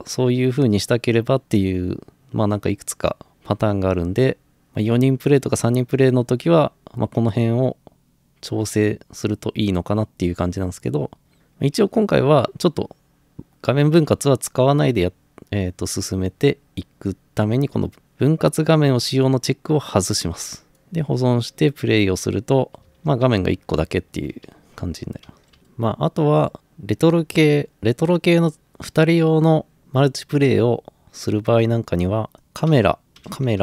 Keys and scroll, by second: 22.8-25.0 typing, 32.4-33.6 typing.